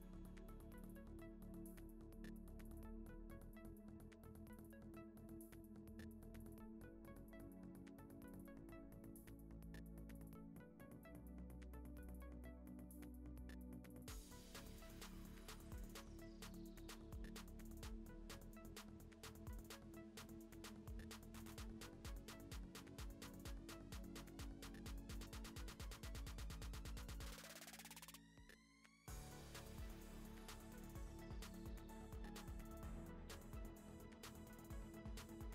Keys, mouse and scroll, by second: 0.1 ctrl+s, 0.3 r, 0.9 shift+d, 2.5 g, 3.0 click, 3.2 g, 3.6 click, 4.7 z, 5.1 click, 5.4 z, 5.6-7.5 drag, 7.5 click, 7.6 click, 7.9-9.5 drag, 9.5 z, 9.9 scroll up 2, 10.2 scroll down 2, 10.6 click, 10.7 click, 10.9 h, 11.2 click, 11.3 click, 11.4 click, 12.0 click, 12.3 r, 13.4 click, 13.9 click, 14.3 KP_0, 14.7 ctrl+s, 15.0 alt+h, 15.3 click, 15.5 click, 16.4 click, 16.6 h, 16.9 click, 17.5 g, 18.2 r, 20.2 click, 21.2 KP_0, 21.5 ctrl+s, 21.6 alt+h, 22.0 ctrl+s, 22.4 middle click, 22.6 scroll down 3, 23.0 shift+right click, 23.1 shift+a, 28.2 KP_7, 28.4 r, 28.9 g, 29.8-30.4 middle drag, 30.4 click, 30.9 click, 31.2 KP_0, 31.6 KP_0, 32.5 scroll up 1, 32.6 ctrl+s, 33.3 click, 34.0 ctrl+s, 34.2 g, 35.3 middle click.